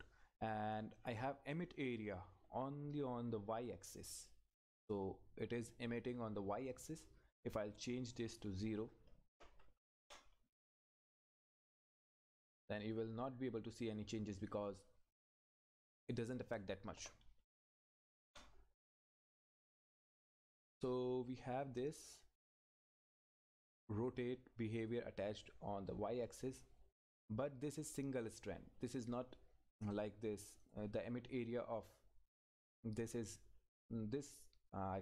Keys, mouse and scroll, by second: 10.0 Return, 12.5 click, 16.5 Left, 18.3 Return, 19.9 click, 21.3-23.1 scroll down 1, 24.8 click, 29.9 click.